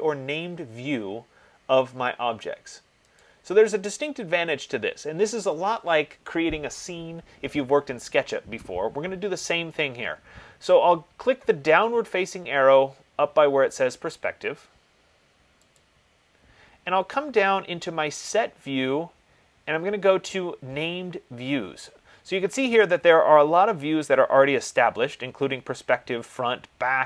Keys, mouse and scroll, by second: 3.9 click, 16.1 click.